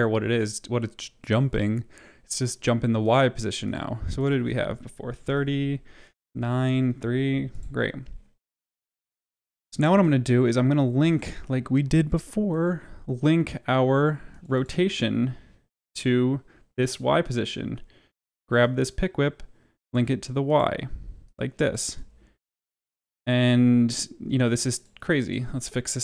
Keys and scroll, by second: 4.8-6.8 typing, 6.2 Tab, 6.8 Tab, 8.9 space, 12.4 r, 21.7 space.